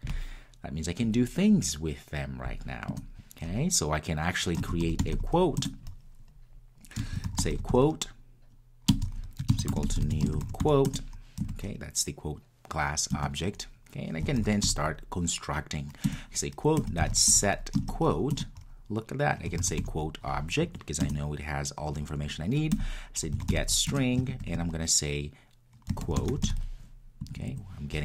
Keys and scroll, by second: 5.7 Return, 10.9 Return, 16.1 Return.